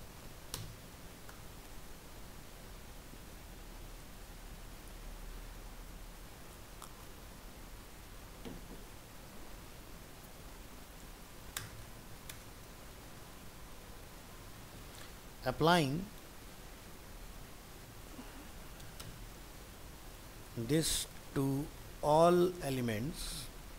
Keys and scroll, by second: 0.9 ctrl+s.